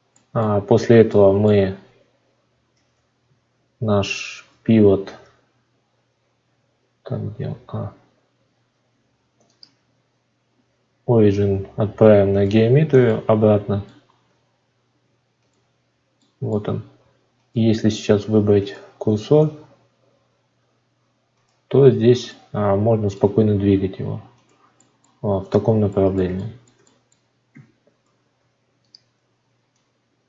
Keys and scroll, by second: 4.3 shift+a, 28.1 shift+d.